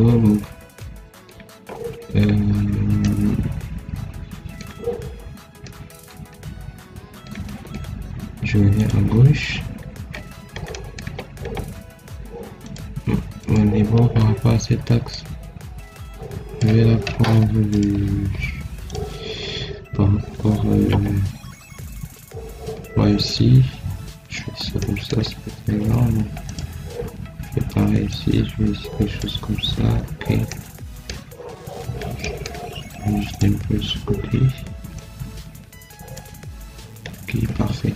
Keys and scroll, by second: 20.7 Escape, 29.6 Escape, 37.4 Escape.